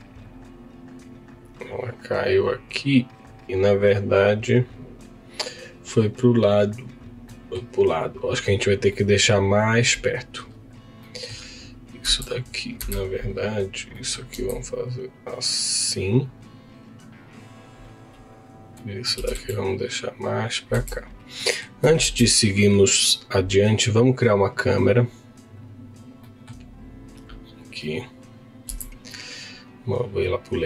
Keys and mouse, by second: 3.3 click, 4.5 click, 8.9 middle click, 10.7 click, 11.1 middle click, 12.2 Tab, 12.8 2, 13.3 click, 13.9 middle click, 14.3 s, 16.2 click, 18.5 click, 18.7 middle click, 19.2 g, 19.2 z, 20.7 Tab, 21.4 middle click, 22.0 shift+a, 26.2 middle click, 27.2 click, 28.6 m.